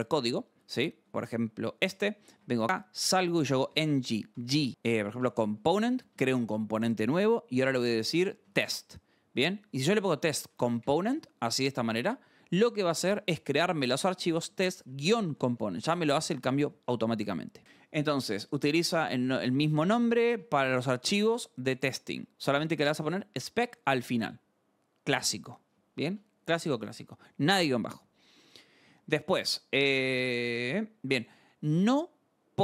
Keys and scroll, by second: 1.1 alt+Tab, 1.9-6.5 typing, 8.0-8.9 typing, 9.9-11.5 typing, 12.9 BackSpace, 13.9-15.9 typing, 16.3 Escape, 16.7 alt+Tab, 28.4 scroll, 29.9 scroll.